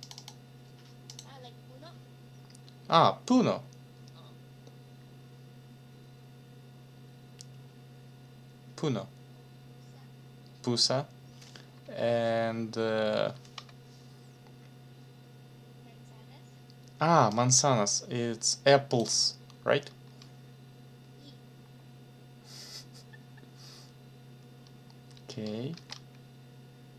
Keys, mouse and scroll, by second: 0.0 click, 17.3-19.1 drag, 25.7 ctrl+c.